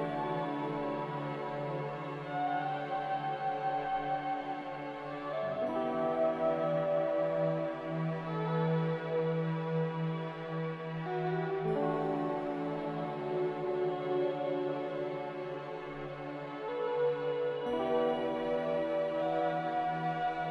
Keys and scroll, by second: 2.8 x, 8.4 m, 10.9 z, 13.6-14.4 typing, 17.2 n.